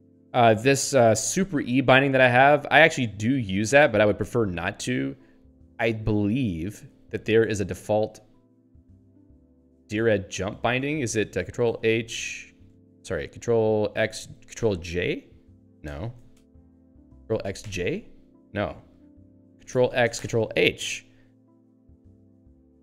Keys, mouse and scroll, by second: 6.9 ctrl+w, 8.1 ctrl+p, 9.3 End, 10.7 ctrl+s, 16.0 ctrl+g, 20.4 ctrl+h, 22.2 alt+o.